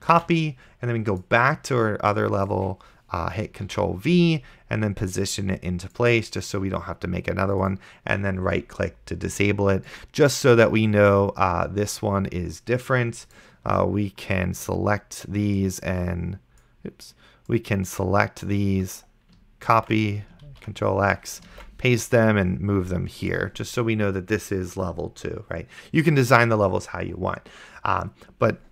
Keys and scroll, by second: 0.4 ctrl+c, 3.9 ctrl+v, 20.0 ctrl+c, 20.8 ctrl+x, 21.8 ctrl+v.